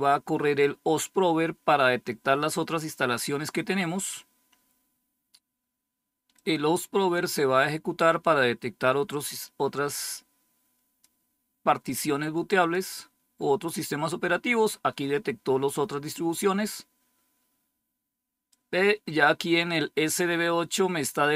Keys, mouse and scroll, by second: 6.2-11.5 drag, 12.5 click, 18.4-20.6 drag.